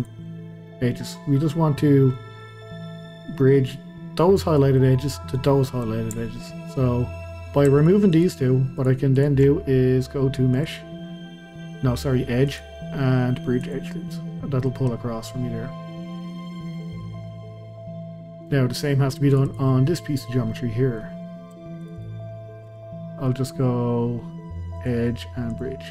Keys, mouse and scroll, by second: 0.0 shift+click, 0.3 scroll down 1, 0.7-2.8 middle drag, 2.8-4.6 scroll up 1, 4.6-7.8 middle drag, 7.8 shift+click, 8.1 shift+click, 8.8 shift+click, 9.1 shift+click, 10.6-13.7 drag, 14.1-19.3 middle drag, 19.3 click, 19.5 click, 20.5-21.8 middle drag, 21.8 shift+click, 22.0 shift+click, 24.8-25.9 drag.